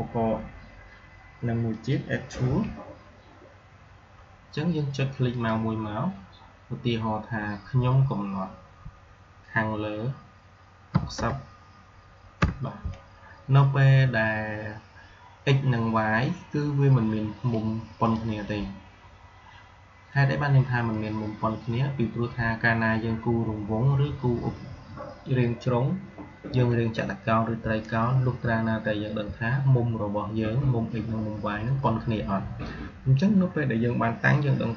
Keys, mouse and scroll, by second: 1.6 click, 5.2 click, 17.9-23.2 drag.